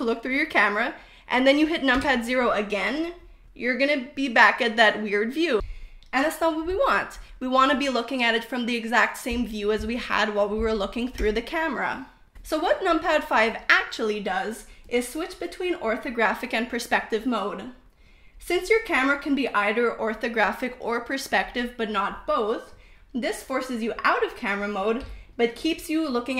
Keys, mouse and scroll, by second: 2.6 KP_0, 4.7-6.5 typing, 12.1 KP_5, 12.9 KP_5, 13.7 KP_5, 14.7 KP_5, 21.4 click, 22.1-23.0 drag, 25.2-26.3 drag.